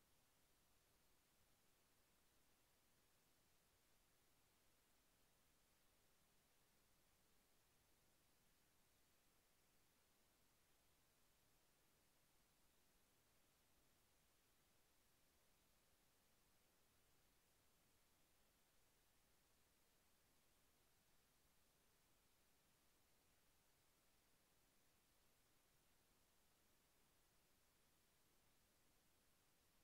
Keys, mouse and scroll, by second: 1.4 click, 3.5 click, 9.6 click, 18.0 click, 27.3 click.